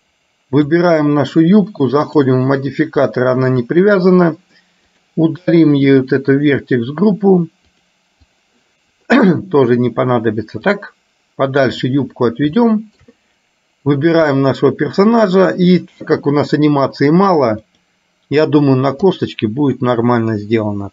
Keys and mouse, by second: 2.1 click, 3.3 shift+middle click, 5.9 click, 8.4 click, 10.9 click, 12.8 shift+middle click, 14.1 click, 17.9-19.4 drag.